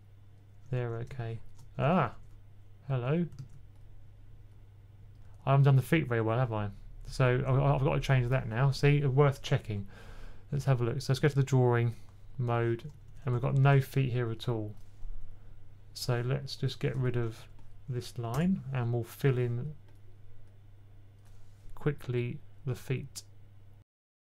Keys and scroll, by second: 0.6-2.0 typing, 3.2 super+z, 6.0 typing, 7.1 super+z, 12.9-13.6 typing, 17.1-18.2 typing.